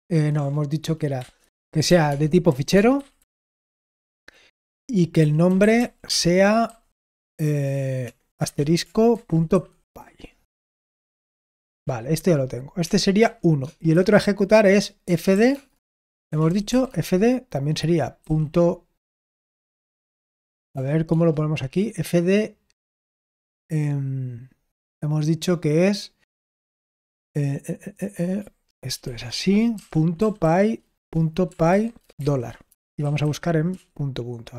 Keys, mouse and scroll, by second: 0.3-3.6 typing, 5.2-6.6 typing, 8.0-13.9 typing, 15.0-17.1 typing, 20.4-21.0 typing, 29.7-33.6 typing.